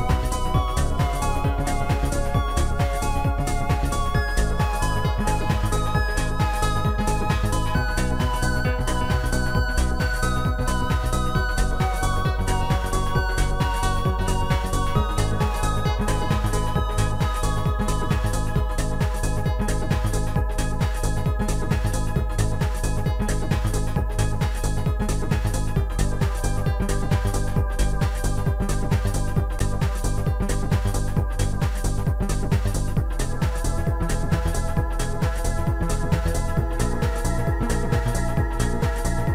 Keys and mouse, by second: 2.0 click, 4.1 click, 8.4 click, 9.2 click, 9.8 click, 11.7 shift+click, 18.1 click, 19.7 click, 21.5 shift+click, 23.1 shift+click, 30.5 click, 31.7 shift+click, 34.2 shift+click, 36.9 shift+click.